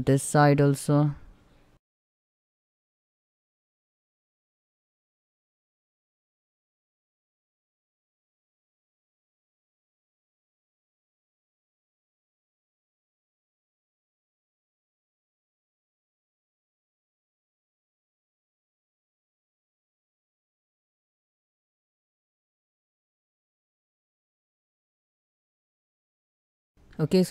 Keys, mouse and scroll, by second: 2.7 shift+middle click, 2.8 scroll up 1, 3.5-6.0 typing, 3.7 shift+middle click, 4.1 ctrl+z, 4.7 click, 4.8 ctrl+middle click, 4.9 ctrl+x, 5.2 shift+middle click, 5.2 scroll up 1, 5.4 shift+middle click, 5.7 click, 5.9 ctrl+x, 6.1 click, 6.7 ctrl+r, 6.8 ctrl+click, 7.3 shift+middle click, 7.8 scroll up 1, 8.1 click, 8.7 space, 9.1 ctrl+z, 9.2 click, 9.7 space, 9.8 click, 10.0 shift+scroll down 1, 10.1 shift+middle click, 10.2 scroll up 1, 10.5 middle click, 11.3 click, 11.4 space, 11.4 shift+middle click, 11.5 scroll up 1, 11.9 c, 12.2 g, 12.3 g, 12.7 middle click, 13.0 scroll down 1, 13.1 shift+middle click, 13.2 middle click, 13.8 scroll down 1, 13.9 shift+middle click, 14.1 scroll up 1, 14.6 click, 16.0 scroll down 1, 16.2 shift+middle click, 16.4 scroll up 1, 16.7 middle click, 17.7 scroll down 1, 17.8 middle click, 18.4 click, 18.5 space, 18.6 middle click, 18.9 click, 19.2 space, 19.4 middle click, 20.0 scroll down 1, 20.2 shift+middle click, 20.7 scroll up 1, 20.9 shift+middle click, 21.1 ctrl+r, 21.2 ctrl+click, 21.9 space, 22.0 scroll down 1, 22.1 Tab, 22.2 middle click, 22.4 Tab, 22.5 middle click, 22.7 scroll up 1, 22.9 click, 23.6 click, 23.7 middle click, 24.0 space, 24.2 click, 24.6 space, 24.7 middle click, 24.9 shift+middle click, 25.4 Tab, 25.4 scroll down 1, 25.5 middle click, 26.2 shift+middle click, 26.4 Tab, 26.5 scroll down 1, 26.7 c, 27.0-27.3 middle drag.